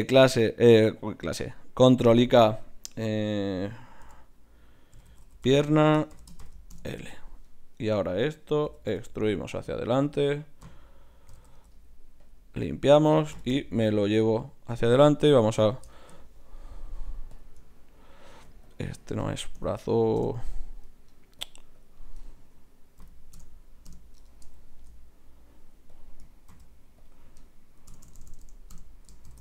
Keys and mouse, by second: 7.8 right click, 8.6 e, 11.3 alt+p, 13.3 g, 16.6-18.4 right drag, 17.3-23.7 drag, 24.6 middle click, 25.3-26.5 right drag, 25.9 click, 27.6 click, 28.0 BackSpace, 28.2 BackSpace.